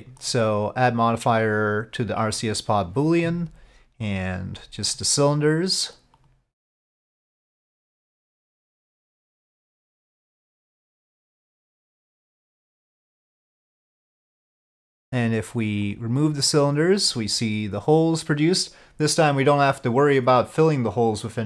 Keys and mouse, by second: 0.3-2.6 drag, 4.2 click, 6.3-8.2 drag, 9.0-10.2 drag, 11.3-12.4 drag, 13.3-14.8 drag, 15.9 click, 16.3 click, 16.7 click, 17.2-21.4 middle drag.